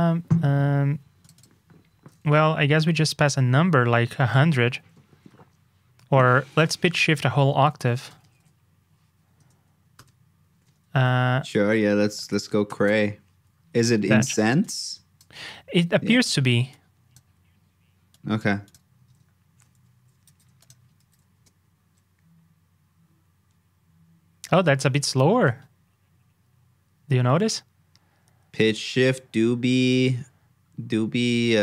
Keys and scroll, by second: 5.1 super+Tab, 15.4 super+Tab, 19.0 super+Tab, 20.2 super+c, 21.0 super+v.